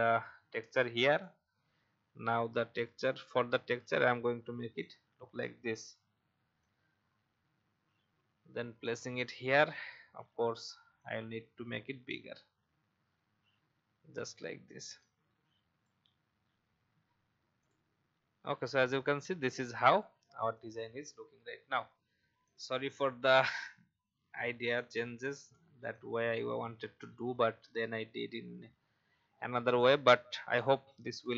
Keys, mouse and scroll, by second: 1.2-4.8 shift+drag, 7.2-30.7 drag.